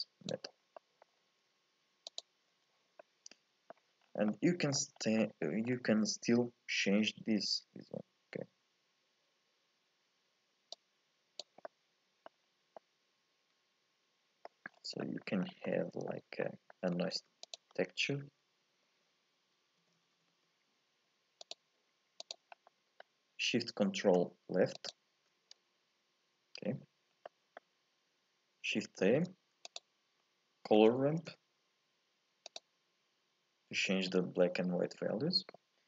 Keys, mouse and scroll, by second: 0.7 scroll up 1, 0.7 middle click, 1.1-2.1 scroll down 2, 2.1 ctrl+shift+click, 2.6-3.0 scroll down 1, 3.0-4.0 middle drag, 4.0 scroll down 4, 4.3 middle click, 5.0 scroll up 3, 5.2 middle click, 5.7 scroll up 1, 10.7 click, 11.7 middle click, 12.4 scroll up 2, 12.8-14.8 middle drag, 14.8-15.1 scroll down 4, 15.1 middle click, 15.5 scroll up 4, 15.7-17.1 middle drag, 17.1 shift+a, 22.6 scroll up 2, 22.7-24.9 middle drag, 24.9 ctrl+shift+click, 27.1 scroll up 1, 27.2-29.0 middle drag, 29.0 shift+a.